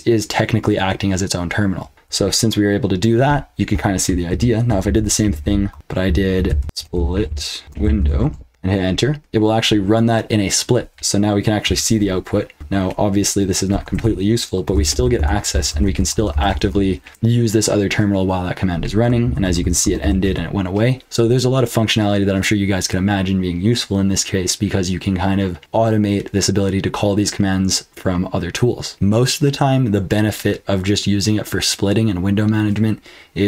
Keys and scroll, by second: 4.3 ctrl+p, 5.0 alt+b, 5.2 alt+b, 5.4 alt+b, 6.4-9.3 typing, 13.7 ctrl+b, 13.9-17.1 typing, 19.2 ctrl+w, 19.4 ctrl+w, 19.6 ctrl+w, 19.8 ctrl+w, 20.0 ctrl+w, 28.7-29.4 typing.